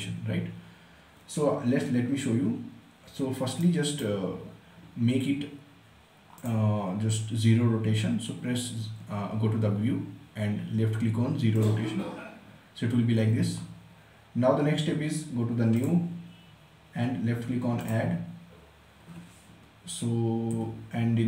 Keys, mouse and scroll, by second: 3.5-6.3 right drag, 6.3 click, 11.5 click, 15.7 click, 20.3 typing.